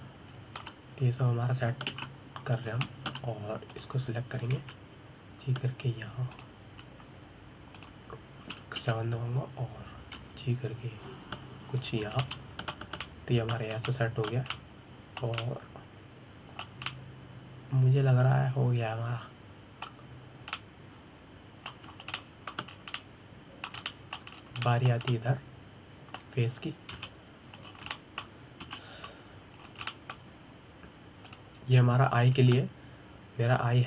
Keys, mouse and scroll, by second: 0.1-3.1 middle drag, 3.6 ctrl+KP_7, 4.5-5.4 shift+middle drag, 5.4 click, 6.2 g, 9.4 click, 10.5 KP_7, 11.9 g, 13.9-15.4 middle drag, 15.4 scroll up 1, 15.5-21.6 middle drag, 22.2-23.6 middle drag, 23.6 shift+scroll down 2, 23.8-24.4 shift+middle drag, 24.4 scroll down 2, 24.6-26.0 middle drag, 26.0 scroll up 3, 26.3-28.6 shift+middle drag, 28.6 KP_1, 29.3-29.6 scroll up 3, 29.6-30.3 shift+middle drag, 30.3 KP_7, 31.3 scroll down 2, 31.6-32.9 shift+middle drag, 32.9 click.